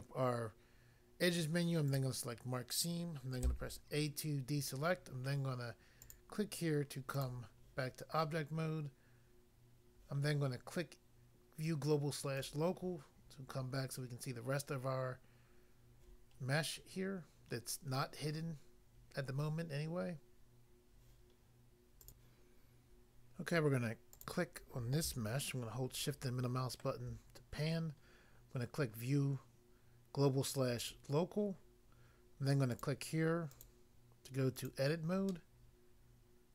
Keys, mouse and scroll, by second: 1.8 click, 1.9 click, 3.5 a, 6.1 click, 7.2 click, 12.3 click, 12.5 click, 13.2 scroll down 1, 22.0 click, 22.2 click, 24.2 click, 25.5 shift+middle click, 30.8 click, 30.9 click, 32.7 click, 32.8 click, 33.5 click, 33.6 click, 34.5 click, 34.7 click, 35.3 middle click.